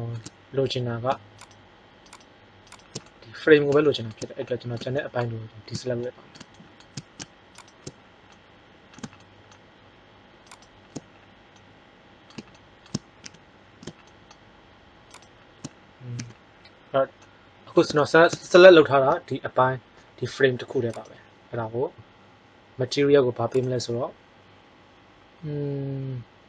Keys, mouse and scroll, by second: 1.4-2.6 right drag, 6.5 middle click, 7.4 right click, 8.1 middle click, 8.4 click, 8.6 click, 10.4 right click, 13.2 z, 15.0-16.7 middle drag, 16.1 z, 19.0 g.